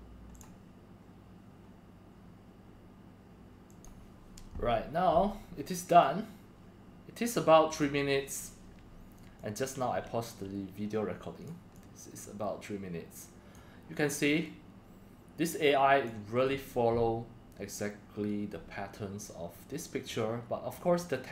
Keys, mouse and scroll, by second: 0.3 click, 3.7 click, 6.1-7.8 drag, 9.4-11.4 drag, 11.8-12.8 drag, 14.4-16.1 drag, 20.1-20.7 drag.